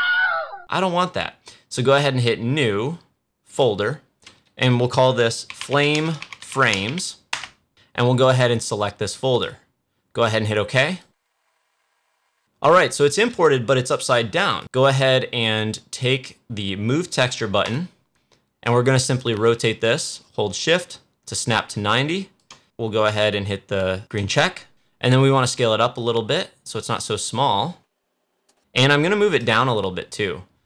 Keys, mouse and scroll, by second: 3.4 click, 3.4 click, 5.2-7.3 typing, 8.2 click, 14.4 click, 17.6-29.3 drag.